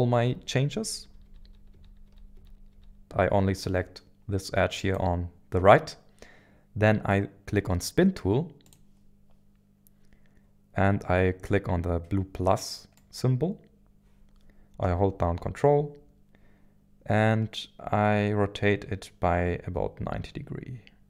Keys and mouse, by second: 0.1 ctrl+z, 0.3 ctrl+z, 1.0 ctrl+z, 1.2 ctrl+z, 1.4 ctrl+z, 1.7 ctrl+z, 2.3 ctrl+z, 2.5 ctrl+z, 2.7 ctrl+z, 3.0 a, 4.9 click, 8.7 click, 13.0-21.0 drag.